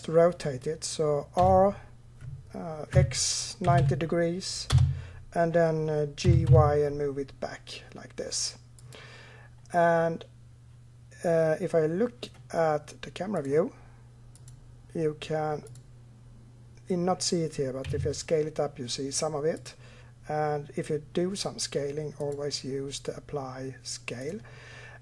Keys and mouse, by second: 1.2 r, 6.1 g, 13.2-14.2 drag, 17.7 s.